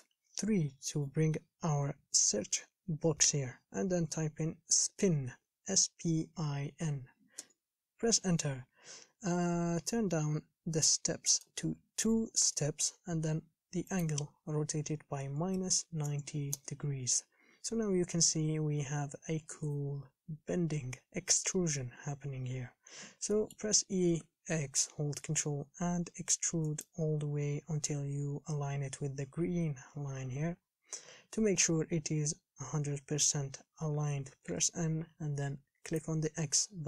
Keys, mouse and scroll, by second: 12.6-23.1 drag, 23.1 scroll down 4, 23.6 shift+middle click, 24.4 e, 34.6 n.